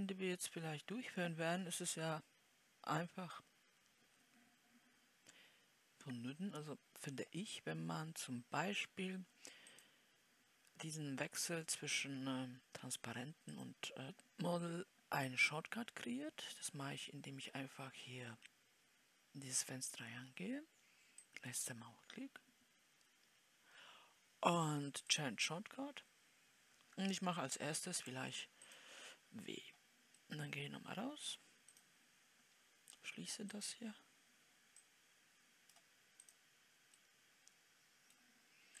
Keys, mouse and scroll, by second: 0.1-4.5 scroll up 2, 30.7-32.0 middle drag, 32.0 scroll up 1, 32.3-35.4 drag, 35.4-37.5 right drag, 37.5-38.8 middle drag.